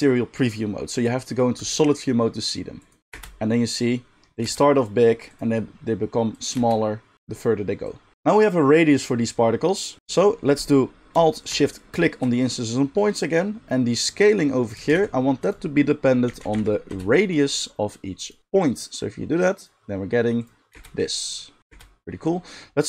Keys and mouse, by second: 1.5 click, 1.9-2.7 drag, 3.1 space, 4.4 space, 5.3 click, 6.5 space, 7.2 space, 12.0-18.7 alt+shift+drag, 14.8 shift+a, 20.7 space, 21.6 space.